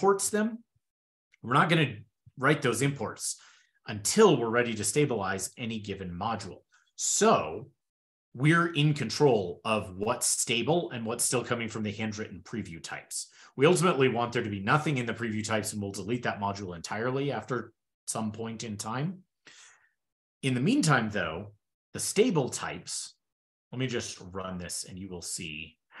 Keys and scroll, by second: 23.1 ctrl+super+Return.